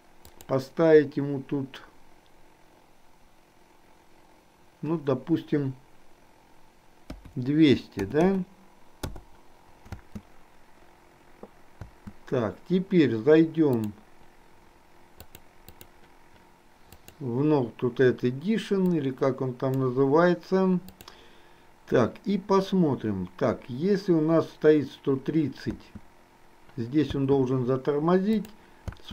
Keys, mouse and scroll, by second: 0.5-9.1 drag, 8.3 KP_0, 10.0 space, 11.9 space, 15.3 click, 17.1 click, 19.1 click, 20.9 click, 25.8 space, 28.4 click.